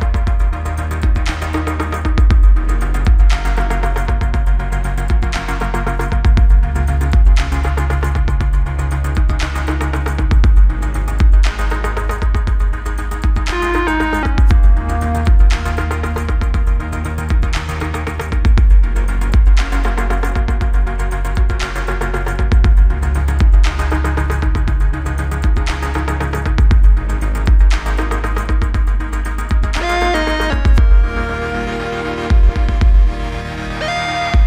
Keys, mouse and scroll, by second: 1.0 click, 5.7 right click, 6.9 click, 8.8-11.3 typing, 12.8 click, 14.3 click, 15.2-16.3 typing, 16.9-18.1 click, 19.5 click, 22.5-23.6 scroll up 1, 23.9 right click, 27.0 click, 28.6 click, 30.6 click, 31.6 Return, 32.2 click, 33.4 Return, 34.0-34.4 scroll down 1.